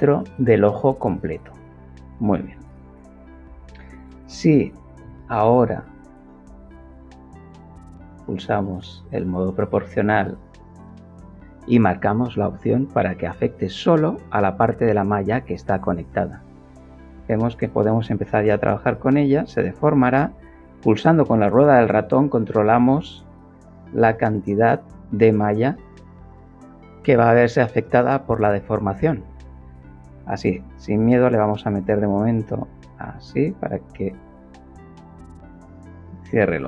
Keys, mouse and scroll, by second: 7.5 click, 8.5 click, 11.1 click, 14.0 click, 15.5 s, 16.6 x, 18.1 s, 18.3 z, 19.5 middle click, 20.7-22.4 middle drag, 23.1-24.2 middle drag, 34.3 click.